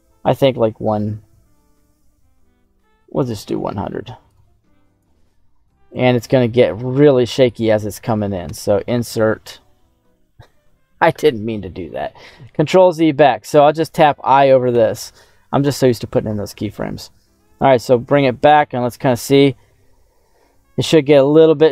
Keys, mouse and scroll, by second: 3.2 click, 3.8 click, 4.5 click, 5.8-7.3 drag, 12.4 ctrl+z, 17.4 click, 18.3 click.